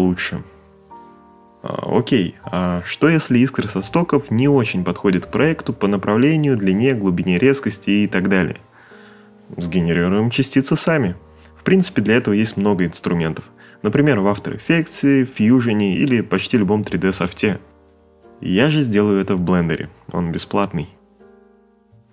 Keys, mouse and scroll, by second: 0.2 click, 1.0 right click.